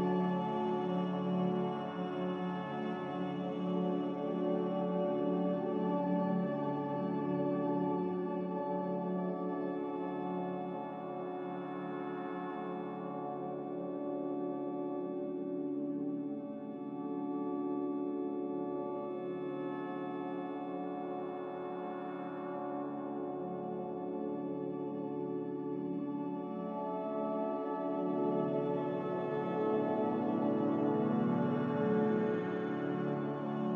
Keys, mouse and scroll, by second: 3.1 typing, 3.3 Return, 8.4-9.2 typing, 11.2-12.2 typing, 13.5-14.7 typing, 18.9-20.3 typing, 20.5 Return, 23.4 typing, 23.5 Return, 29.4 typing, 29.6 Return.